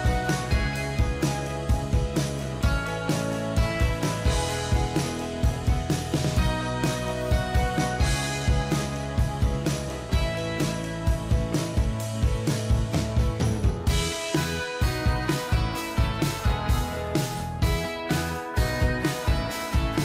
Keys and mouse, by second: 7.4 ctrl+a, 9.1 ctrl+d, 10.1-10.8 Down, 12.9 ctrl+click, 18.9 v.